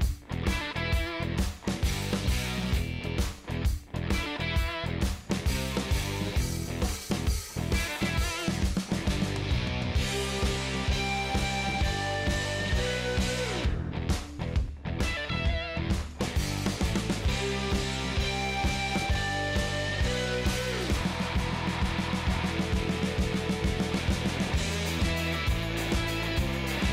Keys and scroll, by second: 3.5 super+d, 17.9 Right, 18.9 Down, 19.2 Right, 19.6 Down, 20.3 Right, 20.9 Down, 21.7 Up, 25.0 ctrl+space, 25.9-26.7 typing.